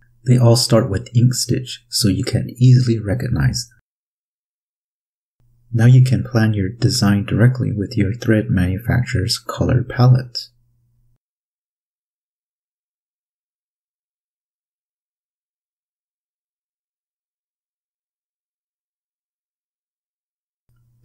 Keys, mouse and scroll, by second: 0.4 click, 5.2 click, 8.8 click, 9.8-12.0 drag, 13.1 ctrl+click, 13.5 click, 15.0 click, 16.2 click, 19.9 click.